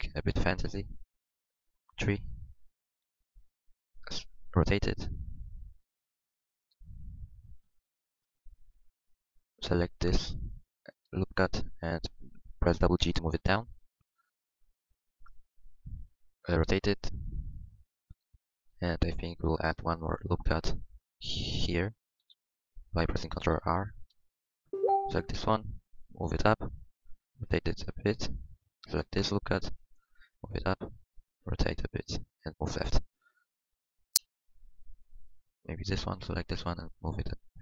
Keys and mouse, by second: 0.0-1.6 middle drag, 1.6-4.8 drag, 4.8 r, 6.8-9.0 drag, 6.8 r, 9.2 click, 13.0 g, 16.6 r, 18.4-23.3 drag, 21.7 ctrl+r, 26.0 click, 26.0 g, 27.5 g, 27.5 r, 28.5-30.8 drag, 30.3 g, 31.5 r, 32.7-35.7 drag, 35.2 r, 36.3-37.4 drag.